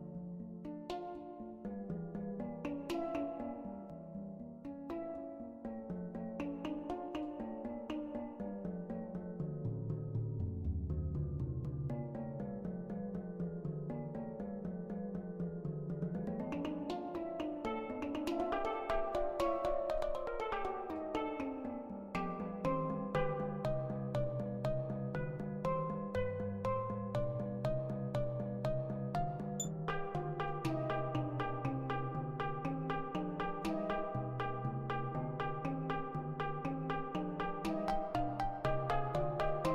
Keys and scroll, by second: 22.4-23.8 typing, 27.1-28.6 typing, 28.8 F4.